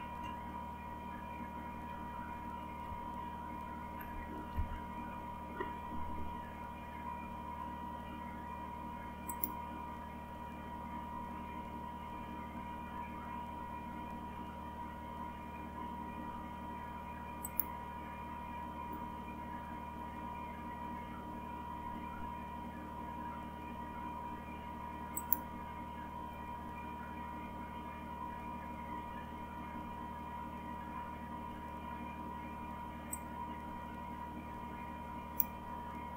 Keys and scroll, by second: 0.0-0.6 typing, 1.8-2.6 typing, 3.7-5.0 typing.